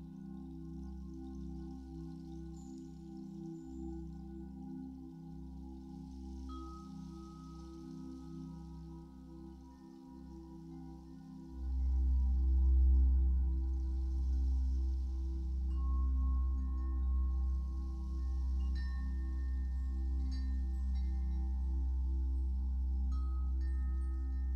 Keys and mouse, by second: 1.8-2.1 drag, 3.3 drag, 4.0 click, 4.8 click, 6.6-9.4 drag, 9.7-24.5 drag.